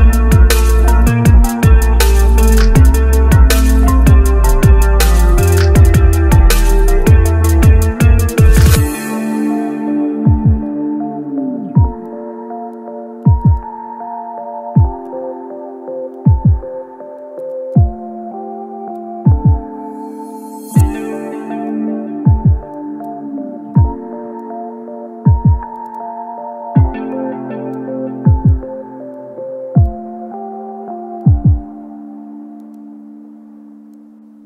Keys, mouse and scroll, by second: 18.4 ctrl+z, 18.6 ctrl+z, 19.0 ctrl+z, 19.4 ctrl+z, 20.8 double click.